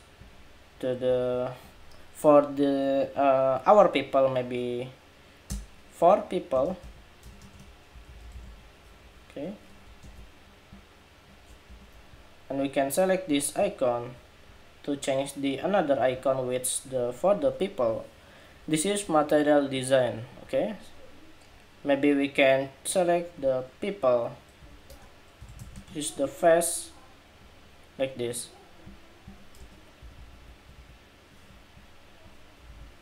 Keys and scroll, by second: 0.9 super+a, 9.7 super+-, 11.4 super+=.